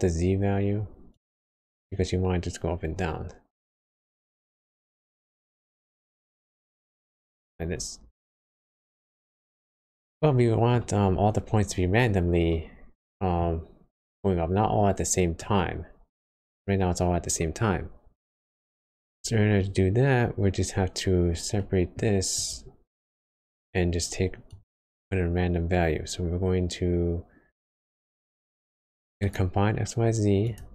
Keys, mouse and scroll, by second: 0.2-0.6 scroll down 2, 1.1 click, 8.0-8.3 scroll down 2, 9.5 middle click, 9.9 scroll up 1, 10.2 scroll down 1, 10.3 middle click, 10.8 scroll up 1, 12.5 middle click, 13.6 scroll up 1, 15.4 click, 21.6 middle click, 22.0-22.6 scroll up 6, 22.3 click, 22.9 scroll down 1, 24.1 scroll down 4, 24.5 click, 24.8 shift+a, 25.0 scroll up 3.